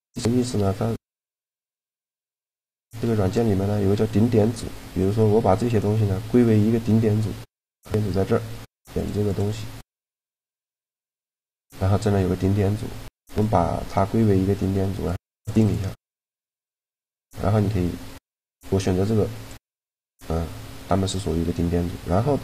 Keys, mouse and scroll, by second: 0.2-3.4 middle drag, 0.8-3.0 drag, 2.6 a, 3.4 b, 7.1-10.8 drag, 11.1-12.9 middle drag, 12.9-17.1 drag, 17.0 a, 19.1-20.7 drag, 21.0 a.